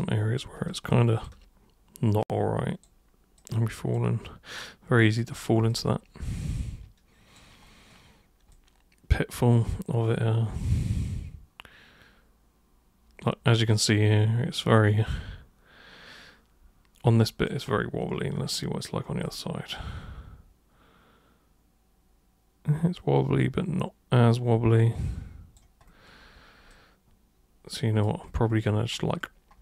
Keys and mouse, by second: 0.9 alt+super+click, 2.2 super+click, 3.3 super+click, 4.5 super+click, 5.6-7.3 alt+super+drag, 8.5-17.4 alt+super+drag, 19.2-25.5 drag, 25.9 alt+super+click, 27.0-28.0 alt+super+drag.